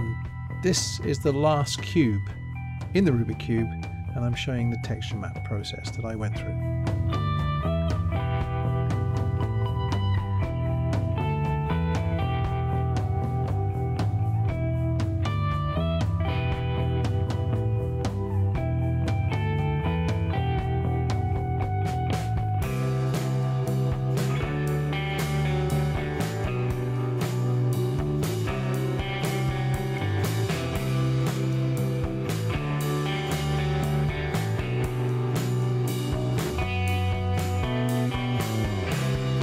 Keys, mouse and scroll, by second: 1.6 middle click, 2.8 middle click, 3.6-4.0 scroll up 1, 4.0 middle click, 4.8 click, 5.4 click, 6.6 click, 8.2 BackSpace, 12.7-14.0 drag, 16.8-17.9 drag, 19.5 click, 21.0 click, 22.1 click, 23.2 click, 23.5 c, 24.6 right click, 25.0-26.2 middle drag, 26.4 c, 27.4-28.8 middle drag, 28.8 c, 30.3 right click, 30.5-32.0 middle drag, 31.8 c, 33.7 right click, 33.9-35.6 middle drag, 35.6 c, 38.7 right click, 38.8 scroll down 1, 39.0 middle click.